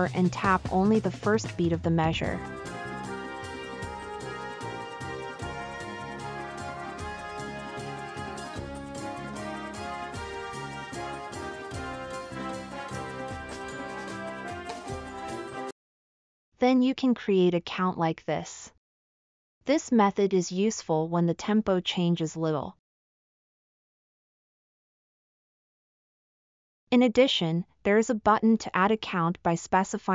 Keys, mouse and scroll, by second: 2.6 click, 2.6 right click, 5.2 click, 5.2-8.4 middle drag, 5.2 right click, 9.8 click, 9.8 right click.